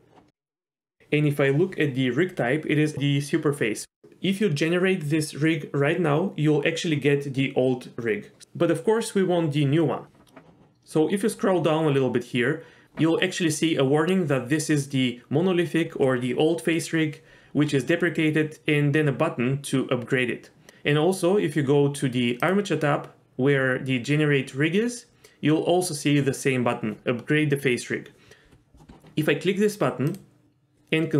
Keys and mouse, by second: 22.4 click, 30.1-31.1 drag.